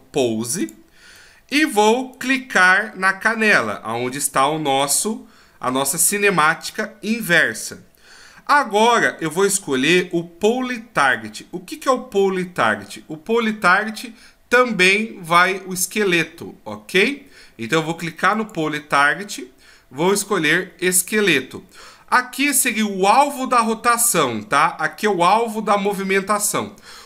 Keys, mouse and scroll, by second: 0.7 click, 1.2 middle click, 2.1 right click, 2.9 scroll up 3, 4.8 click, 7.2-8.0 scroll down 1, 18.3 click.